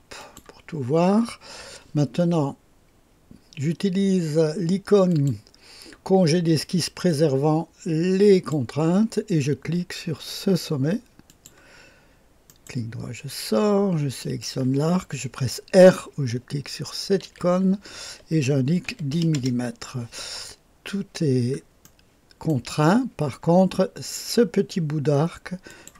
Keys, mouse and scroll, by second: 0.2 click, 5.1 click, 7.1 click, 11.2 click, 12.4 right click, 14.2 click, 17.2 r, 18.8 KP_1, 19.1 KP_0, 19.3 Return, 20.8-21.8 scroll up 1, 21.8 click, 22.5 right click, 23.2-25.7 scroll up 1, 25.7 click.